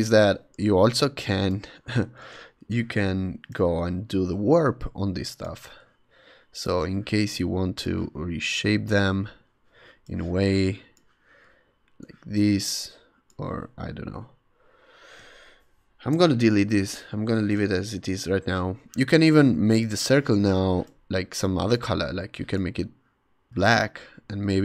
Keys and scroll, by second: 0.1 Return, 0.6 v, 2.2 super+t, 14.1 ↺, 15.9 BackSpace.